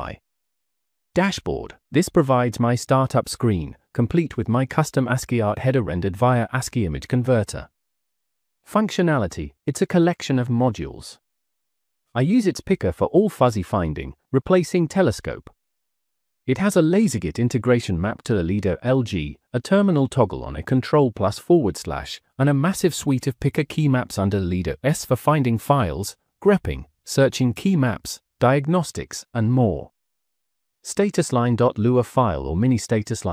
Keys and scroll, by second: 0.0-0.8 typing, 2.0-8.6 typing, 3.7 Tab, 9.6 Tab, 9.9-10.7 typing, 11.7 Tab, 12.3 :, 12.5 Up, 13.0 (, 13.2 ), 13.6 Return, 15.2 Escape, 17.2-21.4 typing, 18.0 Escape, 18.1 Escape, 20.9 Escape, 21.9 Escape, 22.8 Escape, 23.1 -, 25.3 Escape, 25.4 Escape, 25.8-33.2 typing, 31.4 Escape, 31.5 Escape, 31.6 Escape.